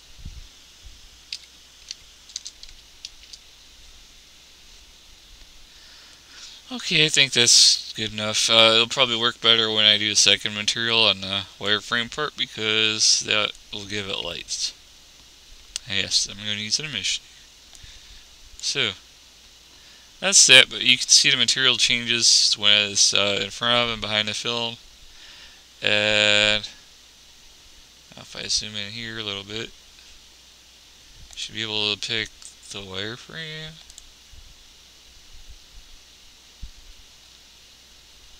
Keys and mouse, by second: 23.9 middle click, 27.5-28.7 middle drag, 29.5 middle click, 30.4-33.1 middle drag.